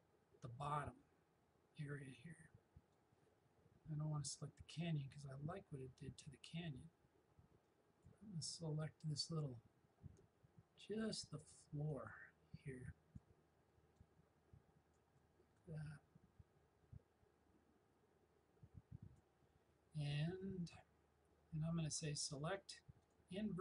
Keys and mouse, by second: 4.8-21.7 alt+drag, 22.3 click.